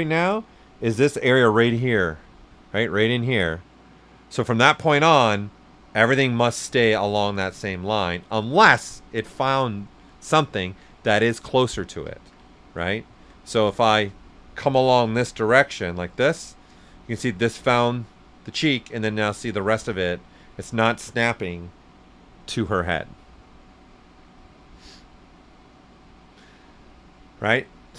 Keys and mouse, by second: 4.8-6.4 right drag, 4.8 typing, 12.0 alt+right click, 12.0 typing, 12.2 ctrl+z, 12.5 right click, 13.0 alt+right click, 13.4 s, 13.5 click, 14.6-16.2 drag, 16.2-27.9 right drag, 19.4 typing.